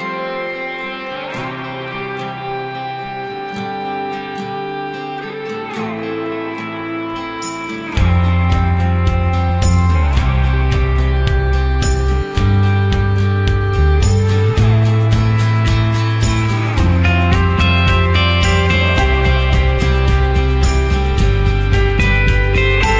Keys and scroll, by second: 2.4 ctrl+t.